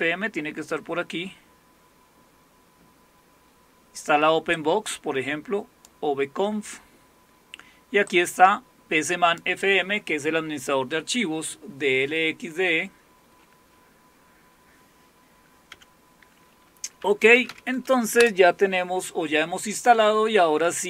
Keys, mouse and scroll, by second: 0.5-4.5 scroll up 1, 4.5-6.8 drag, 8.1-11.9 drag, 13.0-15.3 scroll down 2, 15.3-17.0 scroll down 1, 16.8-18.0 typing, 18.2 Return.